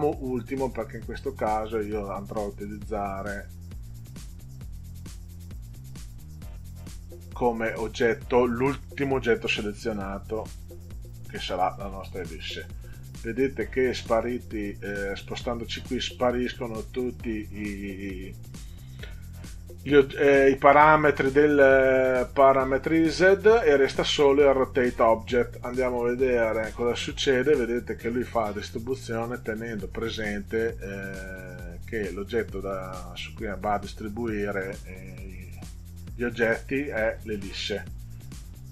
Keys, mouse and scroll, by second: 1.2 click, 10.6 shift+click, 26.0 click.